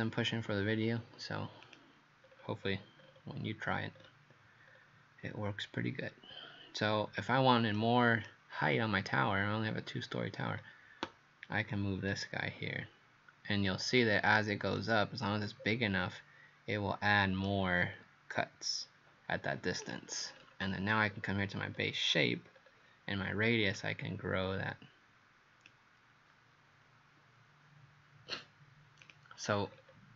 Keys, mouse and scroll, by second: 2.3-3.4 scroll down 9, 4.0-4.7 scroll up 2, 4.7-6.3 scroll up 2, 6.3-7.8 scroll up 2, 7.8 right click, 8.6-9.7 scroll down 4, 9.7-10.5 scroll down 2, 10.5-12.1 scroll up 2, 12.1 click, 14.8 right click, 19.9 click, 20.3 scroll down 4, 21.2-21.5 scroll up 2, 22.6 scroll up 2, 23.8 click, 29.7-30.1 scroll down 4.